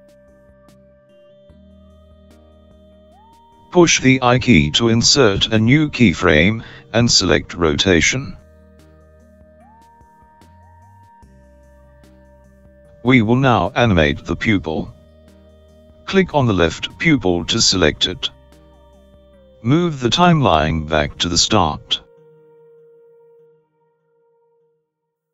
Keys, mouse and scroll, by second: 8.0 i, 17.4 click, 19.1 click.